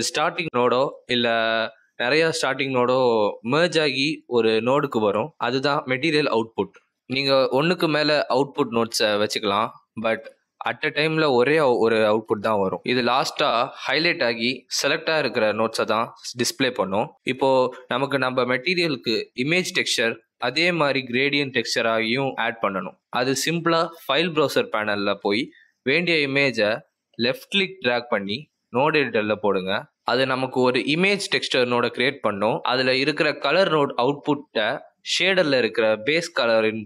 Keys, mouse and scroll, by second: 2.4 click, 3.2 click, 7.2 click, 9.9 shift+d, 14.0 click, 15.4 click, 21.4 Delete, 23.4 click, 24.3 click, 26.2 click, 29.8 middle click, 31.7 click, 33.9 click.